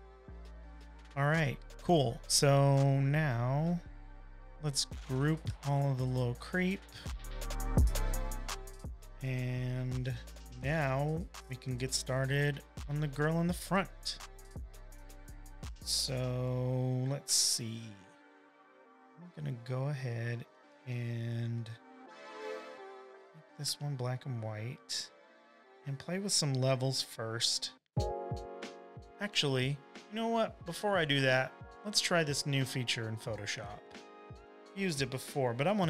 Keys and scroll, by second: 0.0 space, 1.9 v, 2.0 space, 2.6 space, 7.9 super+g, 8.9-10.3 typing, 10.4 Return, 11.6 super+-, 12.3 v, 12.9 v, 16.6 v, 18.3 typing, 18.7 super+j, 21.0 v, 23.0 shift+super+], 23.5-24.5 typing, 26.0 shift+super+u, 27.9 super+l, 33.7 super+z, 34.5-35.8 typing.